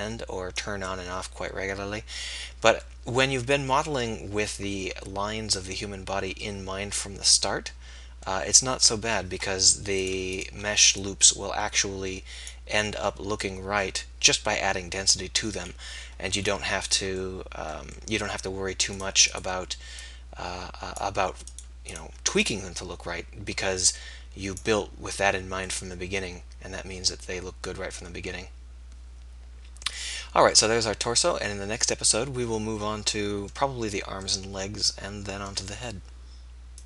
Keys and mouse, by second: 1.1-6.3 middle drag, 15.8-20.1 middle drag, 20.1-21.7 drag, 32.1-36.8 middle drag.